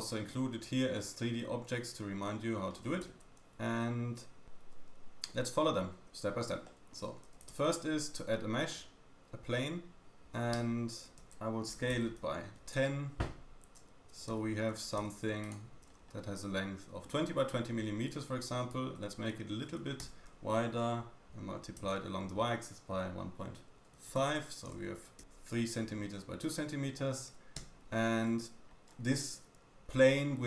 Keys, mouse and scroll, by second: 0.9 middle click, 3.3 y, 4.5 scroll up 1, 6.6 shift+middle click, 7.5 shift+a, 10.1 scroll up 1, 10.7 Tab, 11.2 s, 13.9 scroll down 1, 14.3 Tab, 14.7 Tab, 15.0 q, 15.9-16.4 scroll up 4, 19.2-26.2 drag, 20.0 s, 26.2-27.1 scroll down 3, 27.6 Tab, 28.7 scroll up 2, 28.9-29.2 scroll down 3.